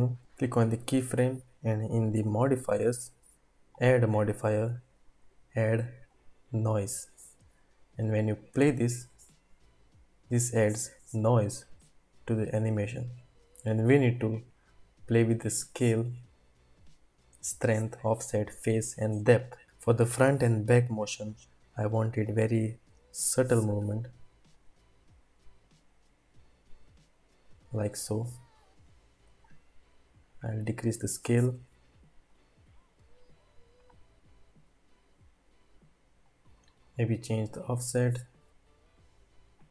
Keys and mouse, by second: 2.2 click, 3.9-6.3 drag, 8.5 space, 14.0-17.4 drag, 14.0 space, 21.4-24.5 drag, 29.5-30.7 drag.